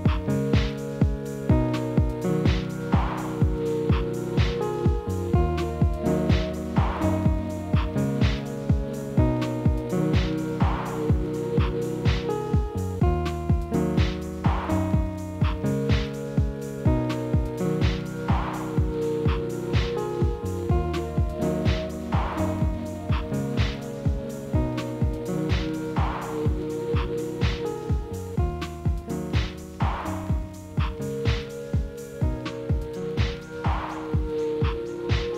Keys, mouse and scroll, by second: 2.9 scroll down 1, 3.0-3.9 middle drag, 3.9 Tab, 4.1 3, 4.3 click, 7.7 shift+click, 8.2 x, 9.1 middle click, 9.8 1, 10.1 click, 11.1 KP_3, 11.8 g, 13.8-15.0 middle drag, 15.0 ctrl+shift+b, 16.6 ctrl+shift+b, 16.9 middle click, 17.3 Tab, 17.5 middle click, 18.2-19.8 drag, 19.8 click, 20.5-21.2 middle drag, 21.2 KP_1, 22.0 click, 22.6 click, 23.3 Tab, 23.5 click, 24.0 3, 24.1 click, 24.4 middle click, 25.2 shift+d, 25.9 s, 27.6 scroll down 1, 27.6 middle click, 28.2 e, 29.9-30.9 middle drag, 30.9 a, 31.8 a, 32.2 click, 32.5 click, 33.5 middle click, 34.1 Tab, 34.8-35.1 ctrl+z, 35.2 ctrl+z.